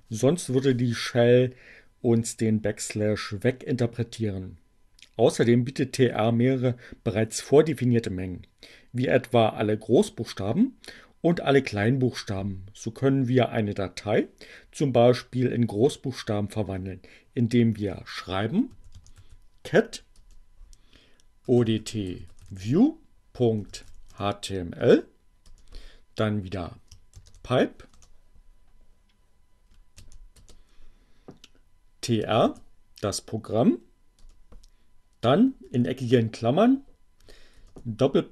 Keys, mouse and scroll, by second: 18.1-19.5 typing, 20.8-24.6 typing, 26.3 shift+<, 27.6 BackSpace, 28.9 alt+<, 30.4 alt+space, 31.0-31.9 typing, 34.0 space, 35.7 alt+8, 36.7 shift+..